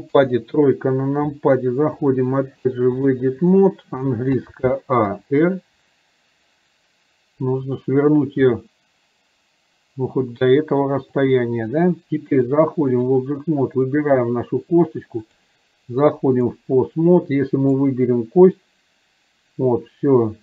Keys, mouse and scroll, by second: 2.1-3.4 drag, 12.5 click, 14.0 click, 15.4-16.5 drag, 18.0-20.4 drag.